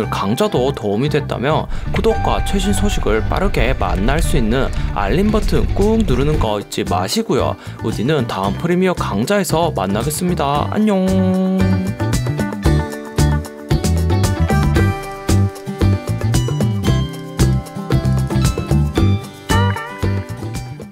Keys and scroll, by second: 1.0 space, 6.6 space.